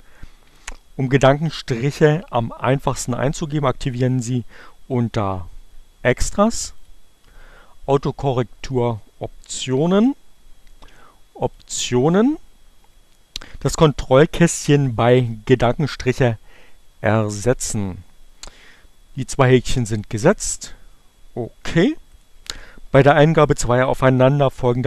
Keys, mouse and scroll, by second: 6.6 click, 7.9-10.0 drag, 11.1 click, 15.9-17.3 drag, 20.7-22.2 drag.